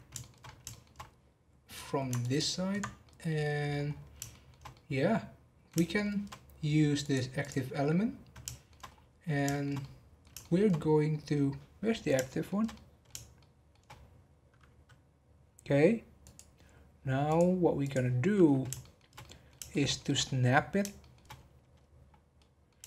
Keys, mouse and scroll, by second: 0.2 shift+middle click, 0.3 shift+scroll down 1, 0.4 scroll up 1, 0.7 shift+middle drag, 1.0-1.5 scroll up 2, 2.2 ctrl+click, 2.8 scroll down 4, 3.0 middle click, 3.8-4.3 scroll down 1, 4.3-7.0 shift+middle drag, 7.0 click, 7.8 scroll down 3, 8.4 shift+middle click, 8.8 scroll up 5, 9.5-11.9 shift+middle drag, 11.9 scroll down 2, 12.3-13.9 shift+middle drag, 13.9-14.5 scroll up 5, 16.2-18.4 drag, 18.4 scroll up 6, 18.8-21.3 shift+middle drag, 21.3-22.2 scroll up 11, 22.3-22.8 middle drag.